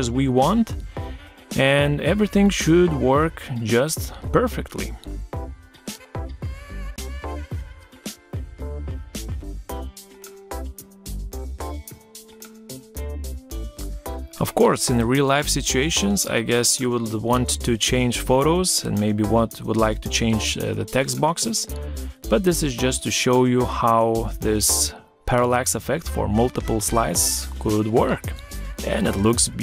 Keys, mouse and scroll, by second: 10.2 shift+click, 10.9 ctrl+c, 12.0 ctrl+v, 16.4 Right, 19.1 Right, 21.6 Right, 24.2 Right, 26.7 Right, 29.2 Right.